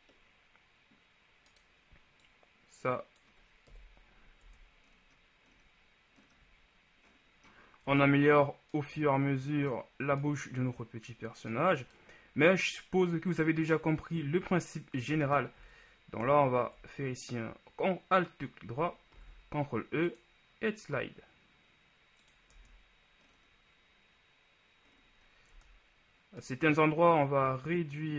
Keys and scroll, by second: 3.9 KP_1, 4.5 Tab, 19.3 ctrl+e, 22.7 Tab, 25.8 Tab.